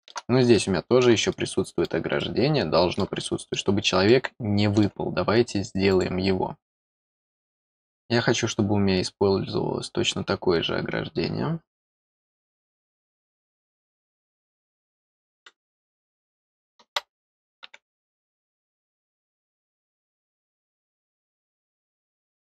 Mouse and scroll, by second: 0.5 middle click, 1.3 middle click, 2.1 middle click, 3.2 middle click, 4.0 middle click, 5.9 click, 13.3 click, 21.3 click.